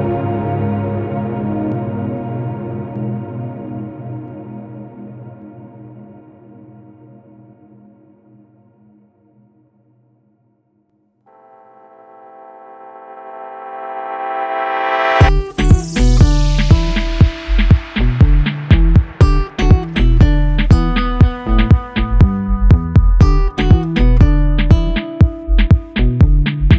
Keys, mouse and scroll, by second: 0.8 scroll down 2, 1.0 click, 1.7-3.0 drag, 3.4 b, 6.0-7.0 drag, 7.3-8.3 middle drag, 8.4 KP_Decimal, 8.7-9.2 middle drag, 9.2 scroll up 1, 9.4-11.0 middle drag, 11.0 Tab, 11.9-13.7 drag, 14.4 Tab, 15.6-16.6 drag, 17.1-17.4 drag, 19.7 shift+a, 20.9-21.9 drag, 22.2-25.1 drag, 25.6-26.7 drag.